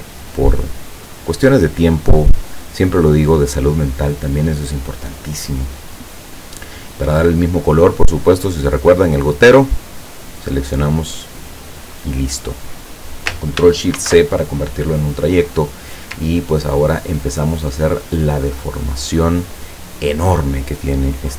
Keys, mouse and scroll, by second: 7.2 click, 9.9 click, 12.2 click, 14.0 ctrl+shift+c, 16.5 ctrl+scroll up 2.